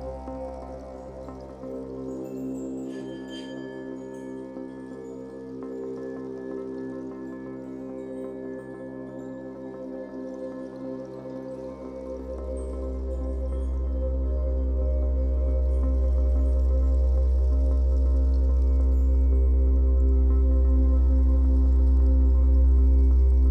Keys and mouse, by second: 4.9 alt+middle click, 5.6 ctrl+alt+click, 7.8-18.1 alt+drag, 18.5-19.5 drag, 21.9 click, 23.3 m.